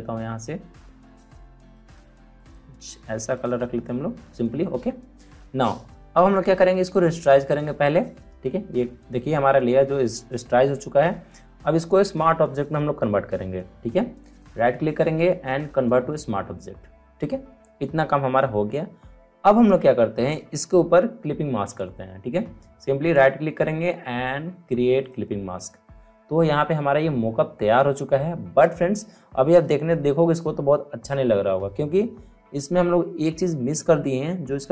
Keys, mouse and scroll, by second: 1.0 click, 6.8 right click, 7.8 click, 14.3 right click, 16.0 click, 23.0 right click, 25.0 click.